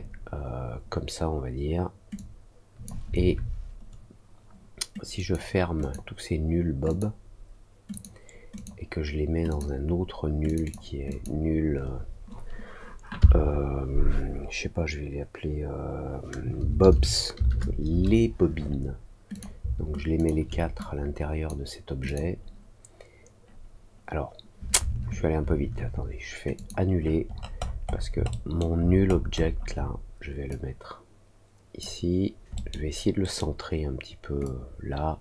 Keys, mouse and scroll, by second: 2.1 click, 5.1 click, 5.7 click, 6.8 click, 7.8 click, 8.5 click, 9.4 click, 10.4 click, 10.6 click, 11.0 click, 19.3 click, 20.1 shift+click, 20.7 click, 22.0 click, 26.5 click, 27.2 middle click, 27.5 middle click, 27.8 middle click, 28.7 alt+middle click, 29.0 alt+middle click, 29.3 alt+middle click, 30.4-31.7 drag, 32.5 middle click, 33.1 middle click, 34.4-35.2 drag.